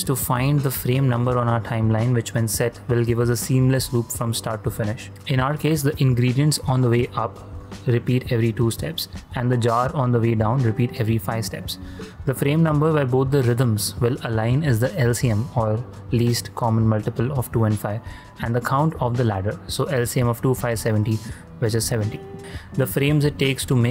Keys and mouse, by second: 0.6 click, 5.8 middle click, 6.8 ctrl+middle click, 7.2 shift+middle click, 7.6 shift+middle click, 8.0 ctrl+middle click, 8.3 shift+middle click, 8.7 ctrl+middle click.